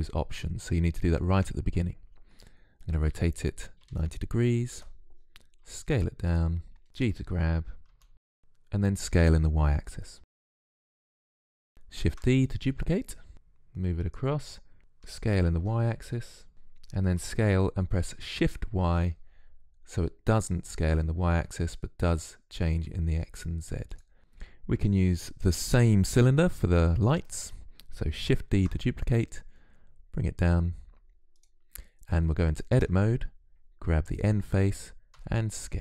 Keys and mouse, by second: 2.9 r, 5.4 s, 6.8 g, 7.6 s, 8.1 s, 10.8 click, 11.9 shift+d, 15.3 s, 17.0 s, 24.2 z, 28.3 shift+d, 32.6 Tab, 34.0-35.0 drag, 35.0 s.